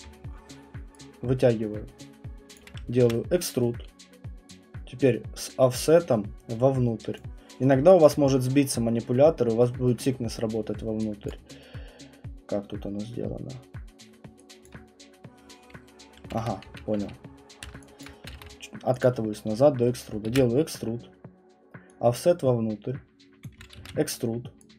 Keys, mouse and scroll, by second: 2.5 click, 3.0 ctrl+e, 7.1 click, 8.0 alt+click, 10.7-15.8 alt+middle click, 11.3 click, 12.4-13.1 scroll, 14.6 alt+click, 16.4 ctrl+z, 16.6 ctrl+z, 17.0 ctrl+z, 18.0 click, 18.3 ctrl+z, 19.0 click, 20.3 ctrl+e, 23.4 click, 23.7 ctrl+e.